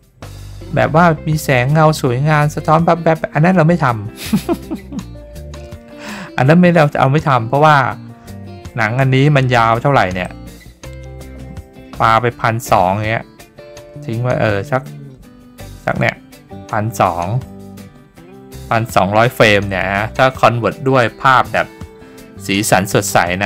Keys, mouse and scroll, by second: 7.9-9.3 scroll down 5, 9.3 scroll down 1, 10.2-19.4 drag.